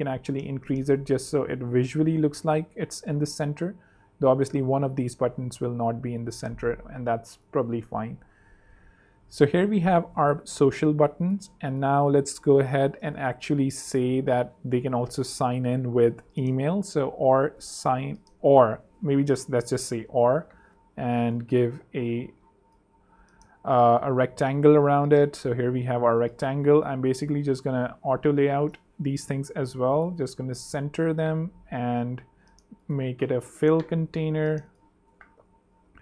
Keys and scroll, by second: 0.5 shift+Up, 3.1 shift+super+Up, 3.2 shift+super+3, 3.8 super+3, 6.4 super+2, 7.9 Up, 8.7 Down, 9.0 Up, 9.3 super+3, 10.3 super+2, 13.0-15.7 typing, 17.3-19.0 typing, 18.4 alt+n, 18.4 alt+BackSpace, 19.4 Down, 21.0 r, 24.0 super+Up, 27.4 shift+a.